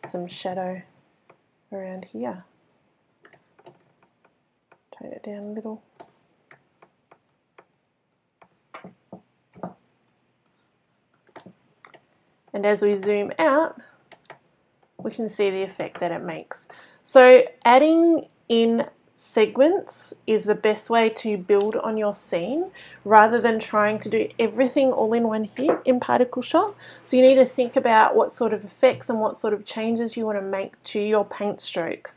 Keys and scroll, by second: 0.9-1.3 typing, 10.1 x.